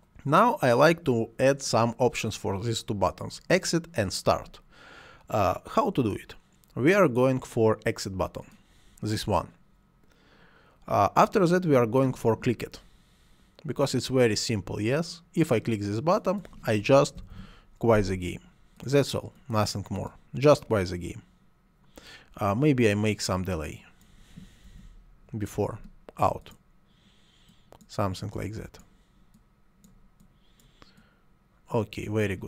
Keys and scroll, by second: 16.6-17.8 typing, 24.4-25.2 typing.